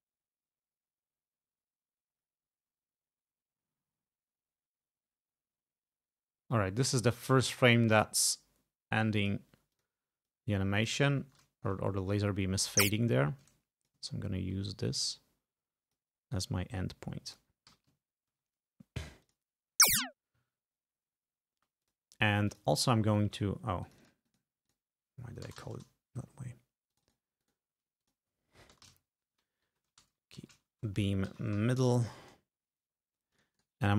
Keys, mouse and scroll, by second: 9.7 click, 10.3 click, 11.2 ctrl+scroll up 2, 11.8 ctrl+scroll down 2, 12.4 ctrl+e, 12.9-14.1 ctrl+drag, 14.4 ctrl+scroll up 2, 15.0-16.1 ctrl+drag, 16.8 click, 17.7 g, 18.1 ctrl+scroll down 2, 19.3 click, 19.8 space, 21.6 space, 21.9 click, 22.5 click, 23.9 click, 24.7 click, 25.5 BackSpace, 25.6 a, 25.8 Return, 26.9 click, 27.4 click, 28.0 click, 28.8 BackSpace, 28.9 a, 29.7 End, 30.1-32.4 typing, 33.4 click, 33.6 right click.